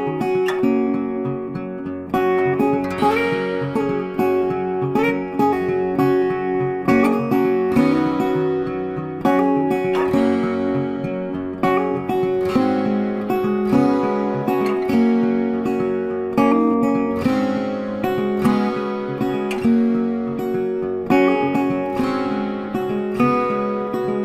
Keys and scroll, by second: 3.6 ctrl+t, 9.4-10.9 typing.